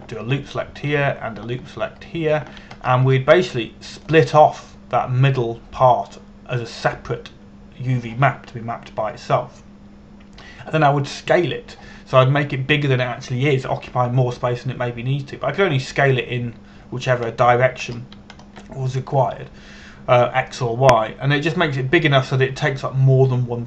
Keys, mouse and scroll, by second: 1.0 right click, 1.9 right click, 3.7 alt+shift+right click, 4.5-4.8 scroll down 1, 4.8 middle click, 18.5-19.8 scroll down 1.